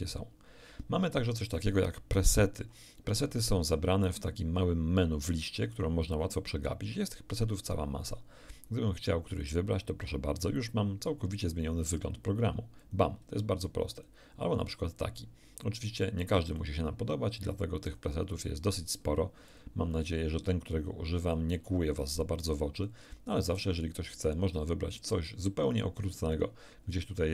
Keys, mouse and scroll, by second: 5.7 click, 9.3 click, 12.8 click, 13.9 click, 16.5 click, 17.9 click, 19.5 click, 21.2 click, 22.7 click.